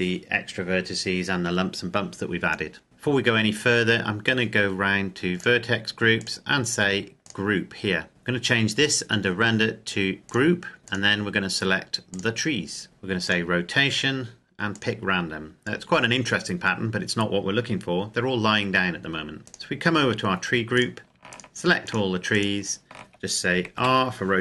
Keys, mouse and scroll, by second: 2.8-4.6 scroll down 1, 5.1 click, 8.1-8.8 scroll up 1, 10.2 click, 13.0 click, 17.9-19.4 scroll up 1, 19.4 click, 20.6 right click, 21.1 shift+right click, 23.6 r.